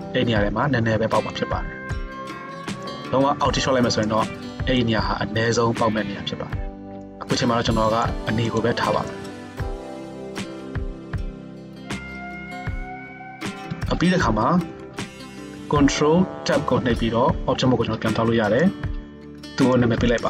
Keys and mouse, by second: 16.4 ctrl+Tab, 19.9 middle click.